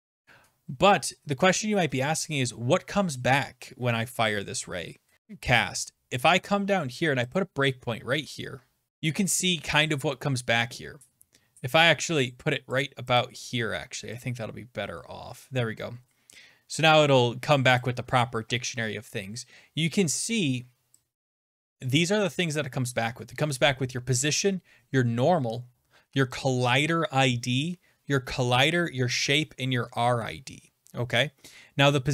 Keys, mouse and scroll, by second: 1.6 Right, 5.9-7.3 scroll down 1, 7.4 click, 8.9 click, 9.1 click, 10.1-10.5 scroll down 3, 10.5-10.9 scroll, 12.3 click, 12.8 click, 13.2 click, 14.3 click, 16.3 scroll, 17.7 scroll, 17.8 click, 18.4 scroll up 8, 21.1 scroll, 21.8 click.